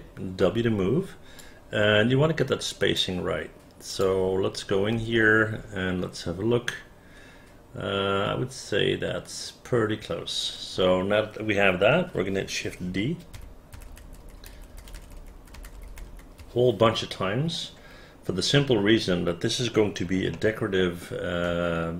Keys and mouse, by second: 0.0 w, 1.5-3.1 drag, 4.0 click, 5.1 space, 13.5-15.9 typing, 20.5 alt+middle click.